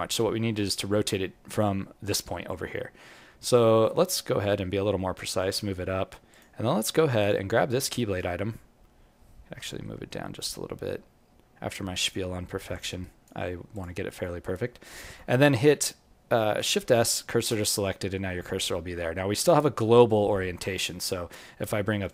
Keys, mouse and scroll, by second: 1.0-2.1 scroll up 11, 2.1-4.2 scroll up 6, 4.2-5.5 scroll up 4, 4.2 g, 6.6 scroll up 1, 7.1 click, 7.1 scroll up 5, 7.6 right click, 8.6-9.1 scroll up 1, 9.5 g, 13.7 click, 14.1-14.8 scroll down 11, 14.8 alt+middle click, 17.5 shift+s, 18.2-19.1 scroll up 4, 19.1 scroll down 1, 19.2-19.8 scroll down 3, 21.1 scroll down 1, 21.1 space.